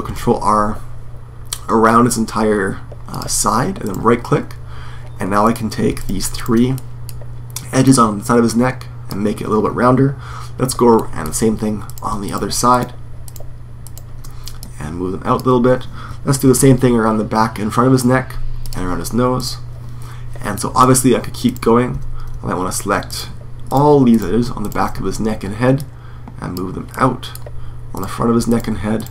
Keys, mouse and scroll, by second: 5.2-6.5 right drag, 6.5 middle click, 6.7 right click, 7.6 middle click, 7.9-9.5 drag, 10.7 middle click, 12.7-14.3 right drag, 15.4 click, 15.5 right click, 16.2 ctrl+r, 20.3 middle click, 21.2-25.5 right drag, 26.1 right click, 26.3-27.4 drag, 27.4-28.5 middle drag, 28.5 right click.